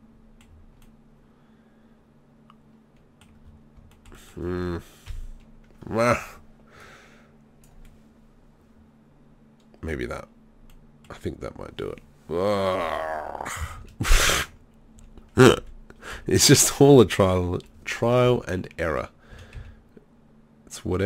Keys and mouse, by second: 3.0 middle click, 5.1 KP_3, 9.0 middle click, 9.6-10.7 middle drag, 13.8 ctrl+z, 14.1 ctrl+z, 15.0 z, 15.6 KP_1, 16.1 KP_3, 18.2 b, 19.3 s.